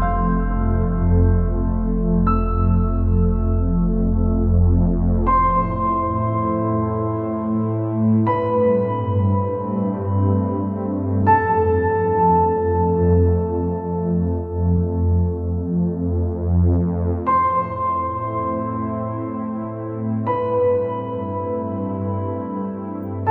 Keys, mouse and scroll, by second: 0.3 scroll down 4, 1.7 KP_7, 2.7-3.0 scroll down 3, 4.4 click, 5.0 click, 7.4 scroll down 3, 7.6 middle click, 8.3-8.9 scroll up 7, 12.2 x, 13.3 scroll down 3, 13.9 KP_7, 14.9 scroll down 3, 15.0 middle click, 15.5 scroll up 3, 16.1-16.7 scroll up 4, 16.7 click, 18.8 shift+right click, 22.9 shift+a.